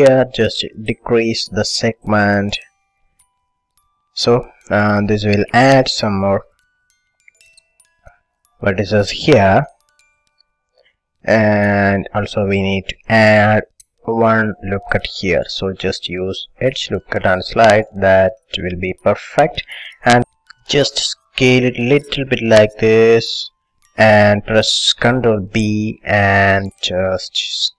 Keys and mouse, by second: 1.0-3.3 drag, 10.6 a, 11.7 click, 16.3-18.1 drag, 23.8-25.7 drag, 25.1 ctrl+b.